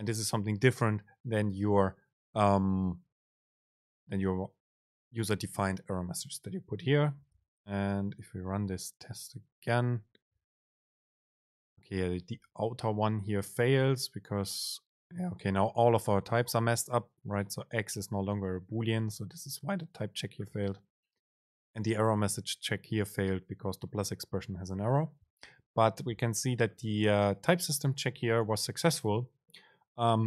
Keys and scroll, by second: 8.3 super+r.